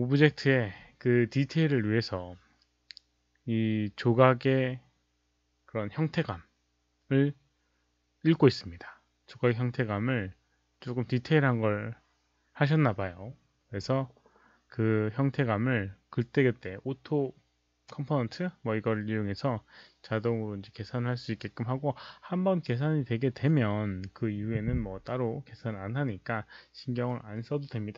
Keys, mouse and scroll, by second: 1.7 click.